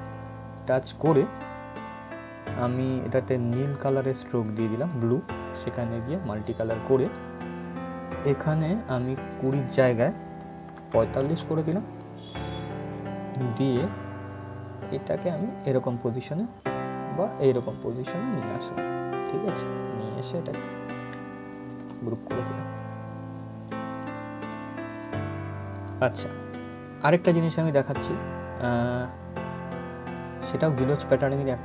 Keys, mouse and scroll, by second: 0.2 click, 4.0 click, 12.0-18.5 drag, 18.8-19.3 scroll down 1, 19.4-21.4 drag, 21.4 ctrl+g, 21.7 click, 24.1 scroll up 1, 25.4 click.